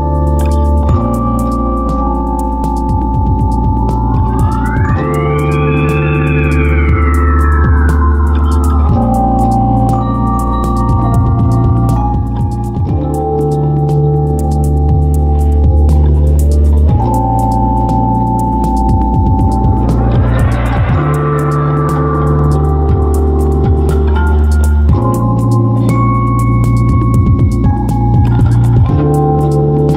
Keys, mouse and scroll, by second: 13.1 m, 23.6 m.